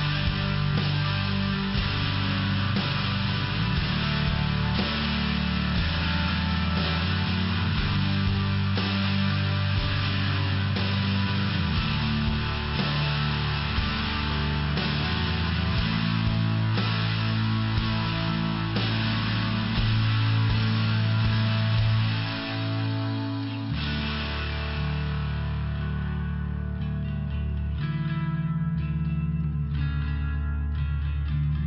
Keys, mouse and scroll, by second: 0.8 click, 4.3 click, 5.9 click, 6.2 click, 9.5 click, 14.1 click, 16.2 click, 16.3 click, 17.2 click, 19.7 click, 24.3 typing, 26.2 click, 27.4 click.